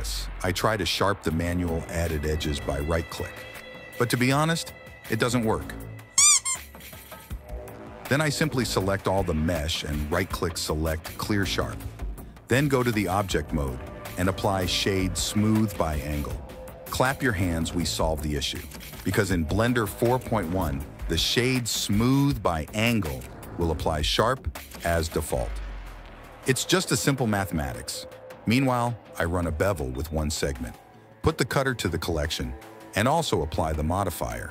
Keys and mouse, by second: 0.1 middle click, 1.7 click, 1.8 click, 2.5 middle click, 2.7 click, 2.8 click, 2.9 right click, 3.4 click, 3.9 a, 4.1 click, 4.7 q, 5.3 click, 5.9 click, 7.1 click, 7.5 click, 7.7 Tab, 8.5 ctrl+z, 8.6 ctrl+z, 8.7 ctrl+z, 8.9 ctrl+z, 9.0 Tab, 10.0 Tab, 10.2 click, 10.7 Tab, 10.9 Tab, 11.5 a, 12.0 click, 12.8 Tab, 13.0 middle click, 13.3 middle click, 13.5 middle click, 13.9 Tab, 14.5 Tab, 15.3 click, 19.6 click, 20.2 Tab, 21.0 shift+middle click, 21.4 click, 22.6 alt+click, 23.2 alt+shift+click, 25.0 alt+shift+click, 26.6 ctrl+b, 29.3 Tab, 32.3 click, 32.7 click, 33.2 m, 34.4 ctrl+a.